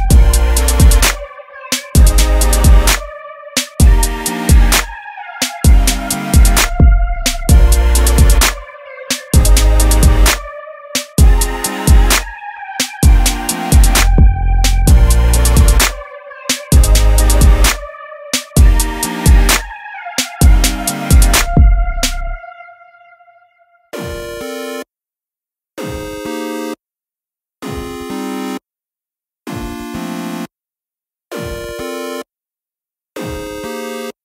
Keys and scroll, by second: 13.9 Return, 27.5 super+e.